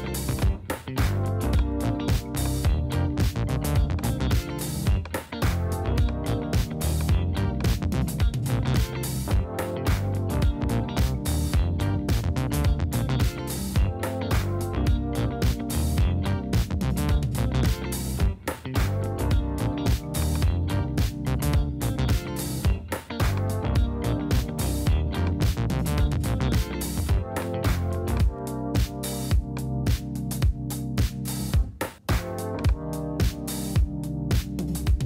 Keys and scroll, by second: 12.5 space, 19.1 space, 21.5 BackSpace, 23.4 BackSpace.